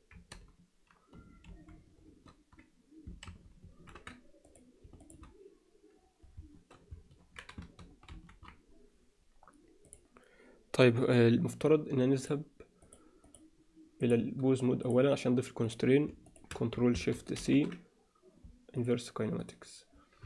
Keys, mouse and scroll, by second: 1.4 ctrl+shift+c, 3.6 ctrl+alt+c, 4.4 click, 5.0 shift+click, 8.1 ctrl+shift+c, 12.2 click, 12.8 click, 13.2 click, 14.0-15.0 drag, 15.6 click, 16.3 shift+click, 17.4 ctrl+shift+c, 19.4 click.